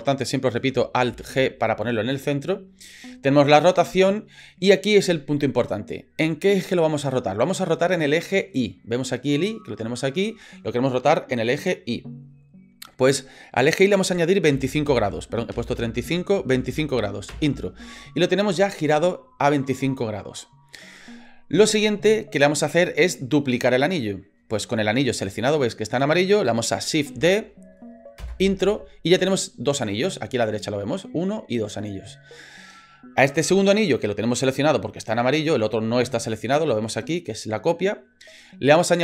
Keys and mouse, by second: 1.1 alt+g, 13.6-17.7 drag, 15.7 BackSpace, 27.1 shift+d.